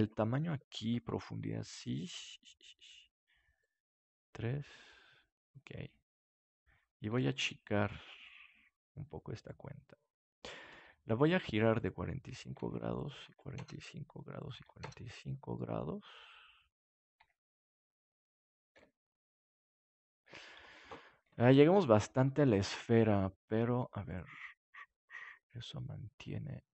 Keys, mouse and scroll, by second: 5.6-7.7 middle drag, 7.3 s, 9.5-10.5 drag, 12.5 KP_4, 12.5 KP_5, 15.2 middle click, 17.1 KP_7, 18.7 g, 20.5-22.0 drag, 21.2 ctrl+s, 24.0-25.8 drag.